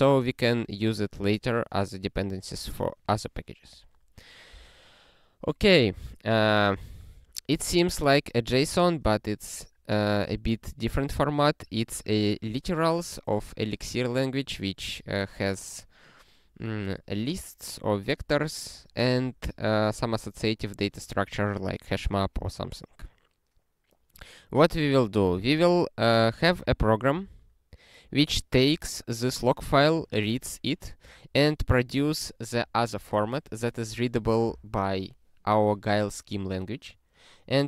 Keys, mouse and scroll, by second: 8.3 click, 8.8 ctrl+p, 9.1 ctrl+p, 10.4 ctrl+a, 11.1 ctrl+alt+@, 11.9 ctrl+g, 25.5 ctrl+f.